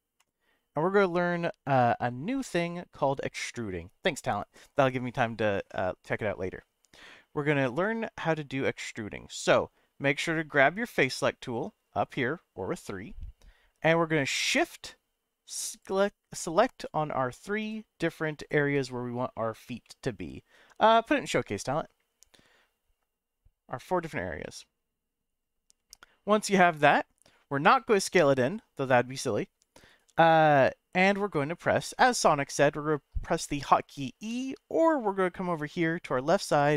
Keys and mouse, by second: 0.2 click, 2.4-3.4 shift+middle drag, 12.9 middle click, 16.8 shift+click, 17.6 shift+click, 18.4 shift+click, 19.8-23.0 middle drag, 24.4 middle click, 27.6 s, 31.6 middle click.